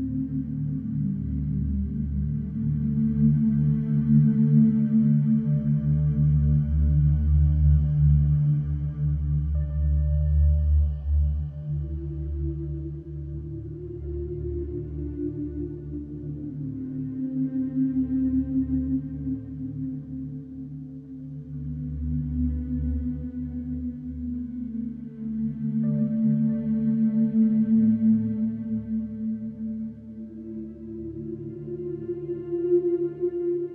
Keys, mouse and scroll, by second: 0.5 click, 2.2 click, 3.4 Delete, 4.3 click, 5.3 Delete, 6.4 click, 6.7 Delete, 7.6 middle click, 10.1 middle click, 11.6 click, 14.0 click, 15.4 Delete, 17.1 click, 17.6 Delete, 18.0 middle click, 19.4 middle click, 21.6 click, 21.8 Delete, 23.1 click, 23.4 Delete, 24.9 click, 25.3 Delete, 26.2 click, 26.6 middle click, 28.1 Delete, 29.1 click, 29.4 Delete, 30.4 click, 30.7 Delete, 31.6 click, 31.9 Delete.